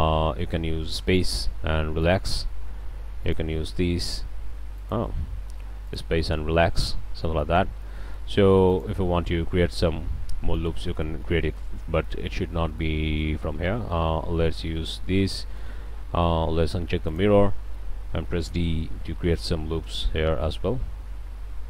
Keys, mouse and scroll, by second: 1.1 click, 2.0 click, 3.2 alt+drag, 4.2 alt+a, 4.8 alt+drag, 5.9-6.2 drag, 6.7-7.0 drag, 7.3-7.6 drag, 7.8 alt+a, 8.0-8.3 alt+drag, 8.7 alt+click, 9.5 e, 10.5-11.1 drag, 11.2 ctrl+z, 13.6 shift+scroll down 2, 13.9-14.6 shift+drag, 14.8-15.8 shift+drag, 15.8 alt+shift+a, 17.1 click, 17.5-17.9 drag, 18.7 d, 19.3-21.6 drag.